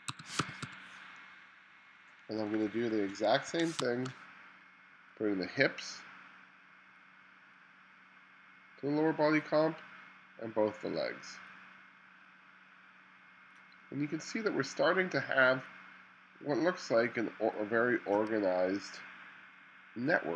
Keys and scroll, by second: 0.0-1.2 typing, 2.5 1, 3.8 space.